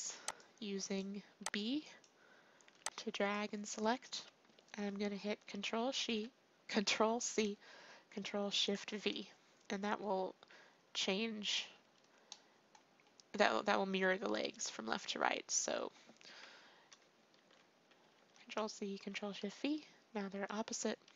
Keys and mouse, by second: 0.1 b, 1.4 b, 2.6 b, 5.9 ctrl+c, 8.8 ctrl+shift+v, 12.2-17.3 drag, 17.3 ctrl+shift+v, 18.1 ctrl+c, 19.0 ctrl+shift+v.